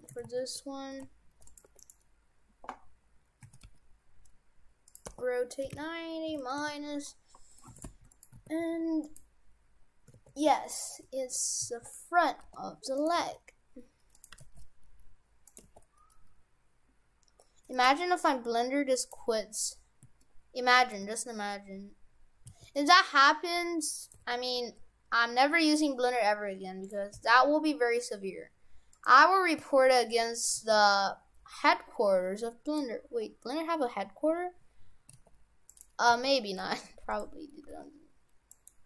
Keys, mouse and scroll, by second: 1.7 Tab, 1.8 right click, 3.1-3.5 scroll down 3, 3.5 a, 3.7 g, 5.1 r, 7.5 middle click, 7.8 shift+f, 8.4 shift+f, 10.3 shift+f, 12.4 g, 13.2 g, 14.4 g, 15.6 g, 19.4-20.0 scroll up 8, 20.2 shift+middle click, 21.2 scroll down 3, 22.4 s, 24.2 g, 27.2 s, 30.5 g, 33.2-33.6 scroll up 3, 35.1 s, 36.1 s, 37.6 g.